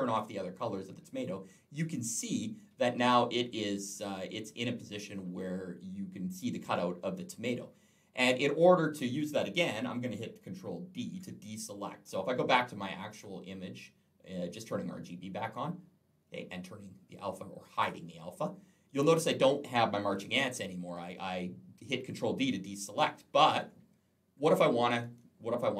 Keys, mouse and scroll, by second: 0.0 click, 10.8 ctrl+d, 13.0 click, 17.5 click, 20.0-20.5 alt+scroll up 1, 22.9-23.8 scroll down 3, 23.8-24.2 scroll up 3, 24.6 alt+scroll down 1.